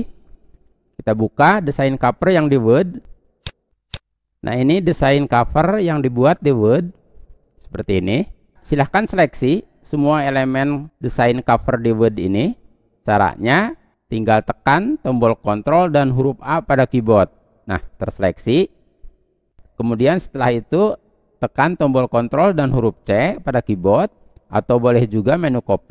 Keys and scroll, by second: 14.2 ctrl+a, 21.2 ctrl+c.